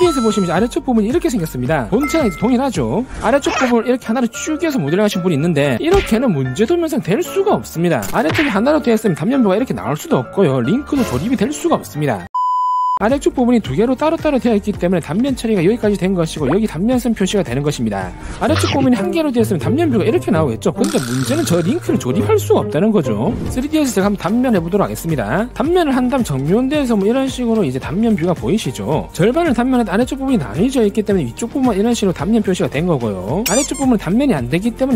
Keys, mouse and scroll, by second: 16.5 click, 25.1 click, 26.8 click, 27.9 click, 28.5-29.0 scroll up 2.